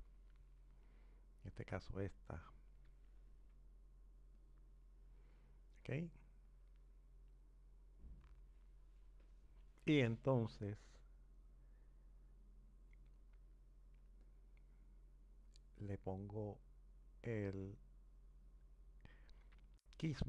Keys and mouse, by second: 6.3 click, 12.9-14.3 drag, 20.0-20.2 drag.